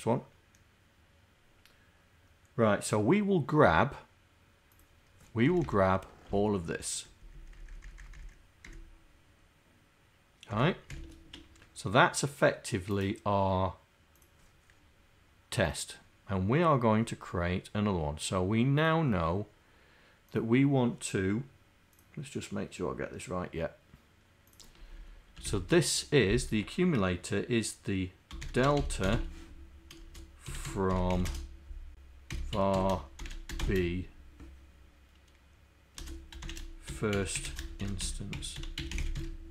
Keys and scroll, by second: 24.9 Left.